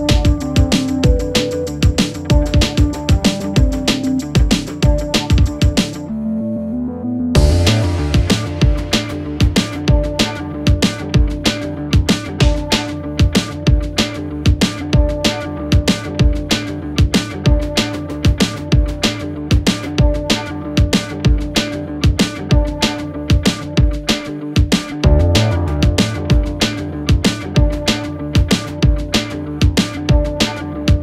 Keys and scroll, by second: 0.1 t, 0.4 c, 0.6 Return, 1.7 b, 1.9 d, 2.0 y, 2.1 Return, 6.1 0, 13.9 ], 25.7 4, 28.6 3, 30.2 4.